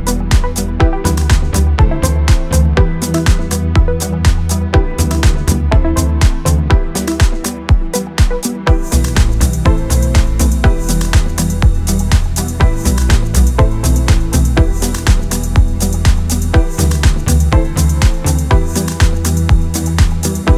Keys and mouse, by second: 0.0-0.7 typing, 1.1 middle click, 1.7 middle click, 2.2 middle click, 2.3 click, 2.3 middle click, 2.5 middle click, 2.7 KP_3, 2.8 shift+middle click, 3.4 click, 3.6 click, 3.8 middle click, 3.9 middle click, 4.2 KP_3, 4.6 e, 4.9 middle click, 5.1 middle click, 5.4 middle click, 6.4 middle click, 6.8 middle click, 7.1 middle click, 7.3 middle click, 7.9 middle click, 8.0 click, 8.5 middle click, 9.0 middle click, 9.2 KP_3, 9.4 KP_1, 9.6 middle click, 10.2 middle click, 10.6 middle click, 10.8 middle click, 11.1 middle click, 11.3 middle click, 11.4 right click, 11.6 middle click, 11.8 middle click, 12.0 KP_3, 12.2 click, 12.4 click, 12.6 middle click, 13.0 middle click, 13.4 KP_3, 14.7 shift+middle click, 15.4 shift+middle click, 16.0 click, 16.0 d, 16.2 d, 17.3-17.7 d, 17.4 click, 17.9 d, 17.9 shift+middle click, 18.3 KP_3, 18.5 right click, 18.5 d, 18.6 middle click, 19.6 middle click, 19.9 shift+middle click, 20.1-20.5 typing, 20.1 click, 20.3 right click.